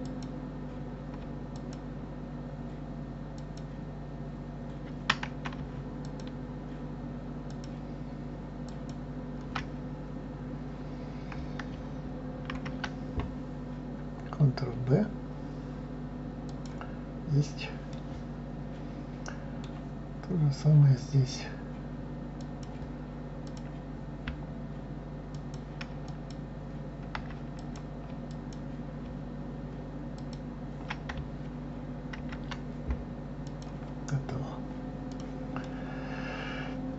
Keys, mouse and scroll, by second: 0.0 click, 1.6 alt+click, 3.4 alt+click, 6.1 alt+shift+click, 7.5 alt+shift+click, 8.6 alt+shift+click, 12.5 ctrl+b, 17.2-17.9 scroll down 3, 17.9-20.1 middle drag, 20.1-20.6 scroll up 2, 22.4 click, 23.5 click, 25.3 shift+click, 26.0 alt+shift+click, 27.6 click, 28.3 alt+click, 30.1 alt+shift+click, 32.2 ctrl+b, 34.3-35.1 scroll down 3, 35.1 click, 35.6-36.9 middle drag.